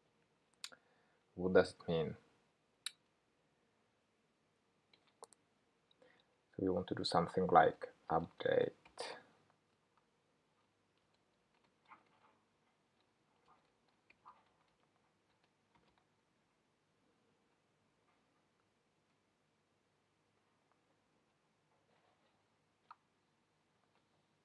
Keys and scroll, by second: 13.0 Return, 20.8 Escape.